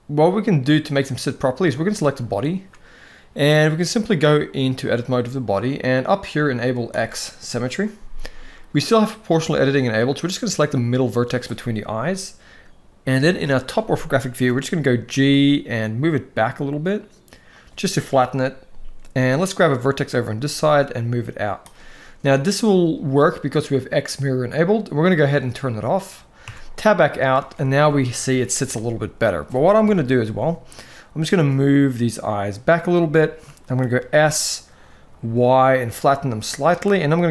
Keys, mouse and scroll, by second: 1.4 click, 3.8-4.7 drag, 6.6 click, 13.0 KP_7, 14.0 shift+middle click, 14.8 g, 19.3 click, 20.2 g, 25.0 click, 26.2 Tab, 26.5-27.0 middle drag, 27.1 alt+a, 27.7-28.1 middle drag, 29.5 KP_7, 31.0 g, 32.9 shift+middle drag, 33.7 s, 37.0 r.